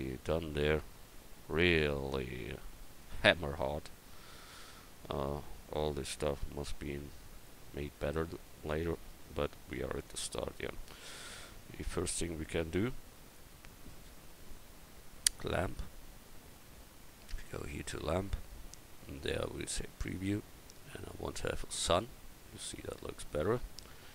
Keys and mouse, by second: 0.0 click, 13.3-14.5 right drag, 14.5-21.9 drag.